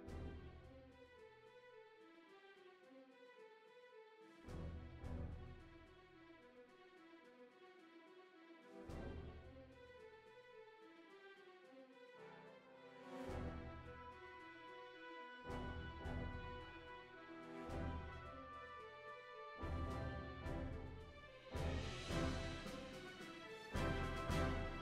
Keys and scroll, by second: 4.2 super+z, 6.6 super+z, 17.3 super+z, 17.6 super+z, 22.1 super+z, 22.4 super+z, 23.4 super+z.